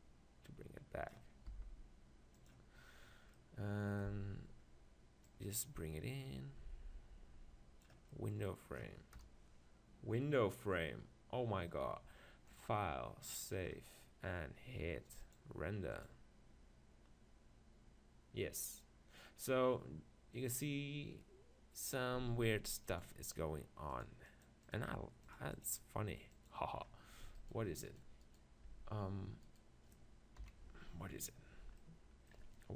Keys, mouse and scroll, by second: 1.5 s, 2.5-4.1 drag, 4.1 z, 8.1-9.2 middle drag, 9.2 KP_0, 12.8-14.4 drag, 15.3-17.1 drag, 23.6-26.3 drag, 26.7-28.3 drag, 27.4-30.4 right drag, 28.7 Tab, 30.4 click, 30.4 KP_7.